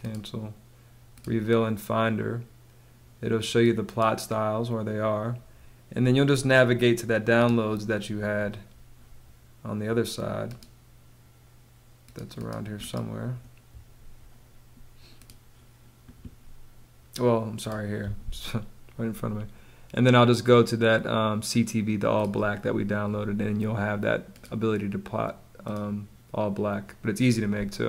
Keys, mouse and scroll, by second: 27.0 space.